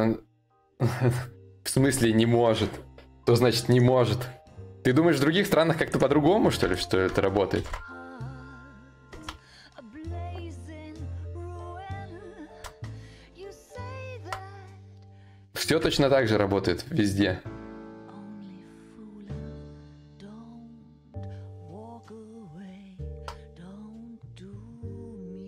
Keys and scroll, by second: 7.2 ctrl+v, 9.0 ctrl+z, 12.1 ctrl+shift+v, 13.8 ctrl+t, 22.6 ctrl+d.